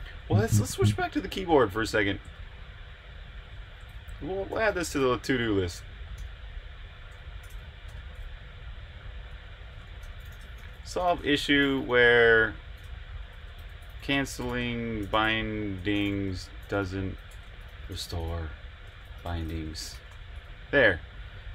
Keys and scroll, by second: 0.0-0.6 typing, 2.3 super+Tab, 4.2-6.9 typing, 9.3-13.5 typing.